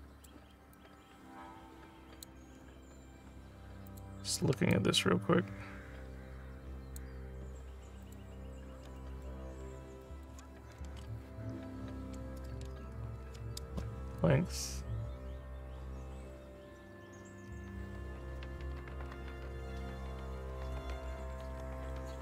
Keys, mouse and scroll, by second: 0.8-2.2 alt+drag, 3.2 scroll up 2, 3.9 click, 4.7-7.0 alt+drag, 8.1 click, 9.0 alt+middle click, 9.6 alt+scroll up 1, 10.1 alt+click, 11.2 Tab, 12.9 alt+middle click, 14.2-22.2 drag.